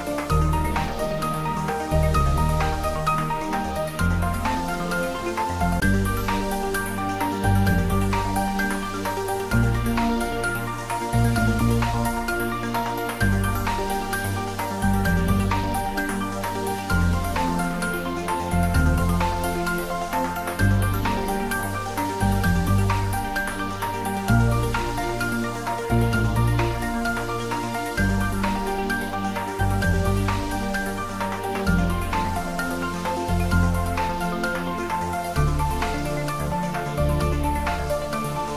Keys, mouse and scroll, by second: 2.0 click, 3.1 shift+d, 3.4 x, 8.2 click, 8.8-9.2 typing, 10.1-10.5 scroll up 1, 11.5 g, 11.9 x, 15.4 click, 15.8 scroll down 1, 17.6 middle click, 18.5 shift+z, 19.6 click, 20.9 shift+z, 21.4 scroll down 1, 22.2 click, 22.6 middle click, 23.5 scroll down 1, 25.7-28.0 drag, 28.0-28.3 scroll up 1, 31.6-35.4 drag, 37.4 scroll down 1, 38.0 middle click.